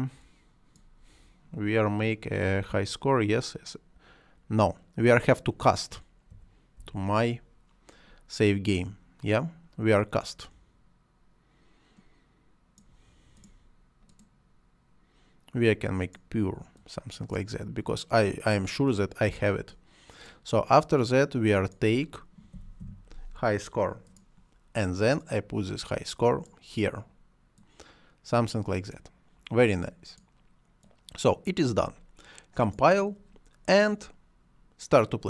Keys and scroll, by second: 6.0 m, 6.5 y, 22.2 h, 22.5 i.